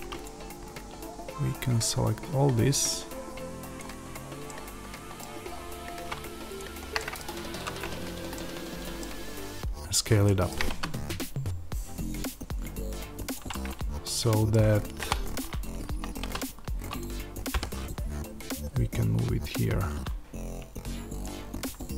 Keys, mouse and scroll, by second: 0.1 click, 3.7 click, 4.3-6.5 middle drag, 5.2-6.5 scroll down 1, 6.5 shift+click, 6.9-13.3 middle drag, 7.3 z, 10.6 s, 13.3 click, 13.4-16.9 middle drag, 16.1 s, 16.9 click, 17.5 g, 21.1 click.